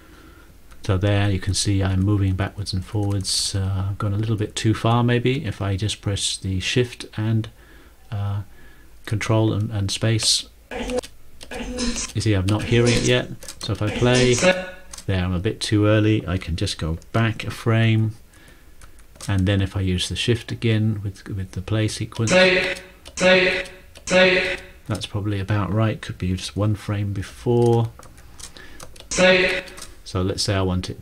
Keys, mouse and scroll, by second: 10.5 ctrl+shift+,, 11.5 ctrl+shift+,, 12.3 ctrl+shift+Down, 14.0 ctrl+space, 23.1 ctrl+shift+,, 23.3 ctrl+shift+,, 23.6 ctrl+shift+,.